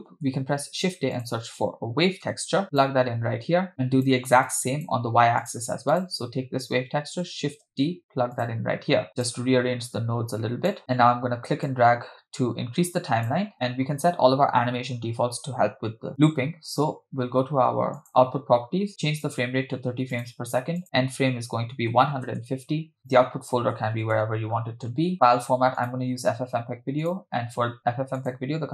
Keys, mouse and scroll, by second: 0.6 shift+a, 3.7-4.1 drag, 3.7 scroll down 2, 4.5-4.9 drag, 5.5 click, 6.0 click, 7.6 shift+d, 9.1 click, 9.9 click, 11.6-13.4 drag, 18.0 click, 19.2-20.4 drag, 20.8-22.4 drag, 23.0-24.2 drag, 24.2 /, 24.8-25.1 scroll down 2, 25.1-26.1 drag, 27.1 click, 27.4-28.2 scroll down 1, 28.2 scroll down 2, 28.2-28.7 drag.